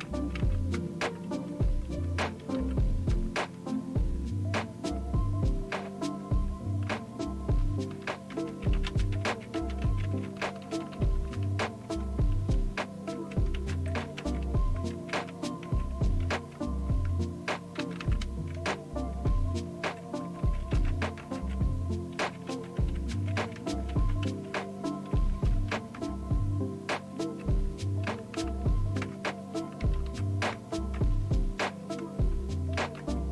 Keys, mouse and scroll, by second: 0.4 Down, 0.7 Return, 2.3 Down, 2.5 Down, 2.9-3.6 typing, 4.6 Return, 5.8-7.4 typing, 7.5 Down, 7.9 Down, 8.3 Return, 8.9 Down, 9.5 Down, 10.1 Down, 10.5 Down, 10.7 Down, 10.9 Down, 11.3 Down, 13.4 Return, 14.8 Return, 15.7 Return, 17.1 Return, 17.8 Down, 18.0 Down, 18.5 space, 19.2 Return, 21.4 Return, 22.7-25.0 typing, 25.7 Return, 29.0 Return, 29.8 Down, 30.0 Down, 30.5 Return, 32.0 Return, 32.9 Down.